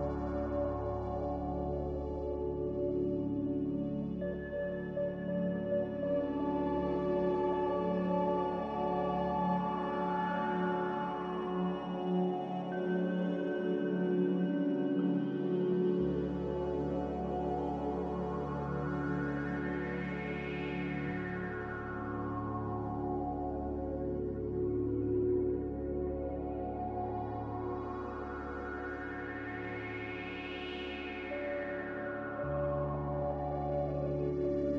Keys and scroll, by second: 9.6-10.6 typing, 11.9 ctrl+b, 23.5 a.